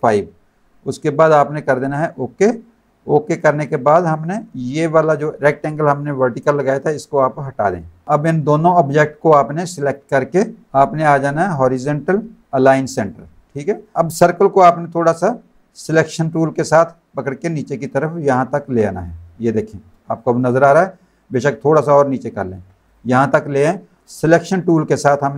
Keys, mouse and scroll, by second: 1.9 click, 4.5 click, 7.5 Delete, 12.9 click, 14.4 click, 19.0 click, 19.6 click, 20.0 space, 20.1 click, 21.3 click, 23.5 click, 24.0 click, 24.6 click.